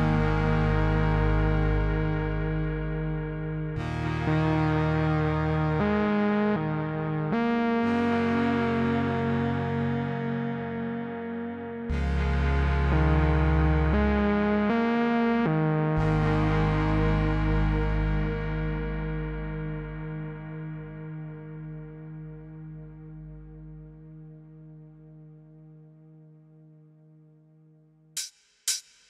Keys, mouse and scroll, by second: 0.2 alt+click, 1.5-3.4 typing, 4.3 click, 6.1-6.7 click, 6.9-8.6 typing, 9.4-10.9 click, 13.3 Return, 15.7 space, 21.0 space, 22.0-23.3 click, 24.9 right click, 26.1 click, 27.6 click.